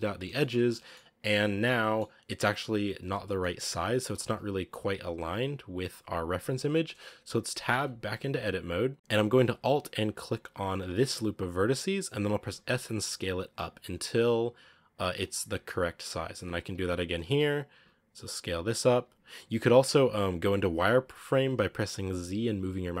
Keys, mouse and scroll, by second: 0.9-1.5 scroll up 3, 1.5-4.0 middle drag, 4.0 KP_1, 6.5-7.0 scroll down 4, 7.0 scroll up 2, 7.6 Tab, 10.1 alt+right click, 11.4 scroll up 1, 12.3 s, 16.9 alt+right click, 17.5 s, 19.3-19.8 scroll down 3, 19.8-21.7 scroll up 3, 22.2 z.